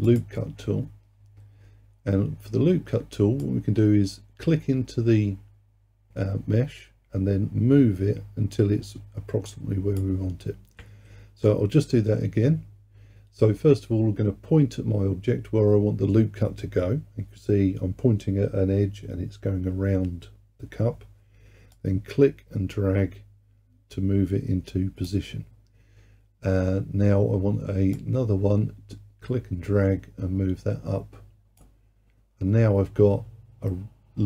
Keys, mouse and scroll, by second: 0.1-3.2 drag, 3.4-6.5 drag, 11.1 ctrl+z, 21.8-24.8 drag, 28.0-31.2 drag.